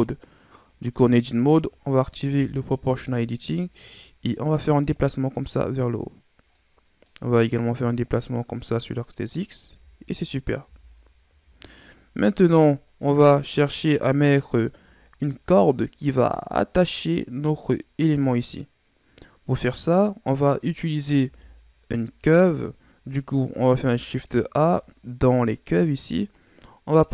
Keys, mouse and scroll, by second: 2.3 o, 3.8-6.5 drag, 6.5-7.8 middle drag, 7.8-9.6 drag, 9.6 KP_1, 10.6 Tab, 11.2 a, 11.4-12.8 scroll down 4, 12.8-13.9 scroll down 3, 13.9-14.9 scroll up 8, 14.9-16.8 scroll up 2, 19.5-19.9 scroll down 2, 19.9-21.2 middle drag, 21.2 KP_1, 22.4-23.7 scroll down 3, 23.7 shift+a.